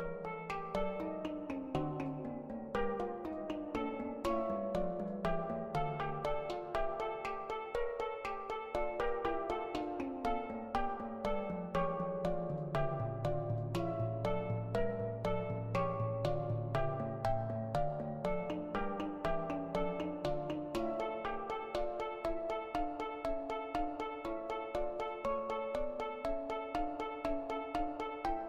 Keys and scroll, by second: 0.2 x, 0.6 ], 1.2 ], 13.5 [, 17.5 ctrl+z.